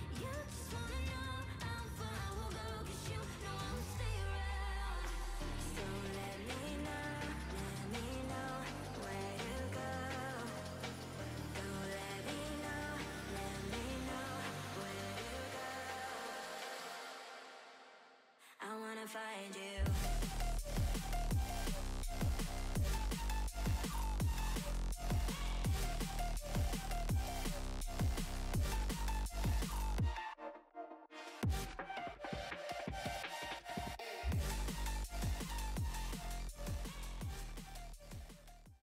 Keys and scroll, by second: 3.3-4.1 typing.